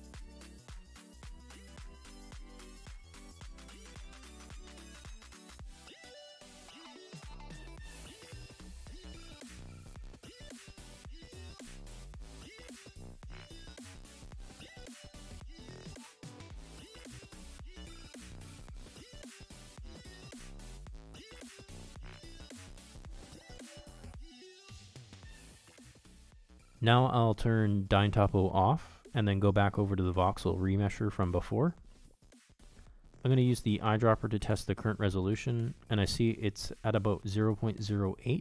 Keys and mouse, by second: 2.9 ctrl+Tab, 4.8-6.4 drag, 6.7-12.4 drag, 14.7 f, 16.0 shift+click, 16.3 shift+click, 16.8 shift+click, 17.9 KP_Decimal, 18.8 ctrl+middle click, 20.0 ctrl+middle click, 20.3 middle click, 21.0 shift+click, 21.5 shift+click, 21.7 shift+click, 22.0 middle click, 22.4 middle click, 22.9 shift+click, 23.0 shift+click, 23.7-25.6 shift+drag, 25.7-27.5 shift+drag, 28.0 shift+click, 34.1-35.9 drag, 36.6-38.4 drag.